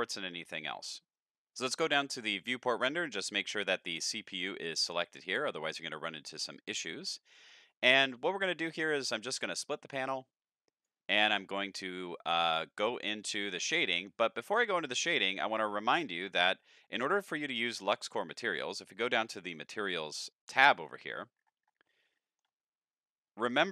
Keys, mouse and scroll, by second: 0.2 middle click, 2.3 click, 3.8 click, 5.4 click, 9.3-10.8 drag, 12.8 click, 13.6 click, 18.3 click, 21.3-22.0 scroll up 6, 22.1 shift+middle drag.